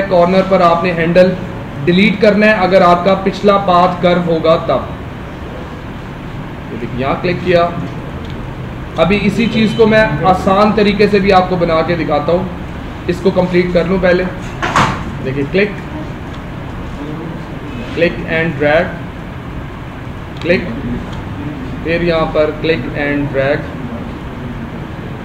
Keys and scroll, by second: 2.0 space, 8.3 space, 11.0 ctrl+z, 15.3 space, 20.5 space.